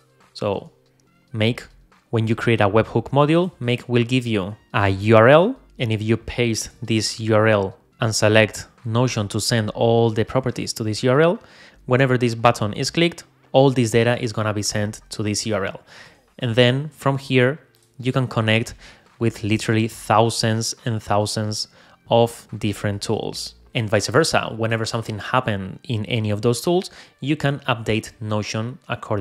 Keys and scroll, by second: 0.8 super+Tab, 5.6 super+Tab, 6.7 super+v, 16.2 super+Tab.